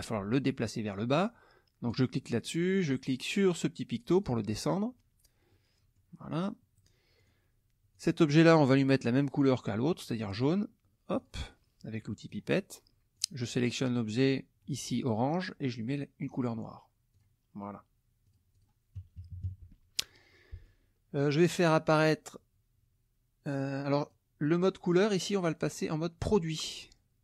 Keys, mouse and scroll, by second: 1.9 click, 4.2 click, 5.5 middle click, 7.2 click, 7.9 click, 10.4 click, 11.2 click, 12.3 click, 13.1 click, 16.2 click, 17.1 click, 18.2 click, 19.2 KP_Subtract, 20.3 middle click, 24.0 click, 25.8-27.0 drag.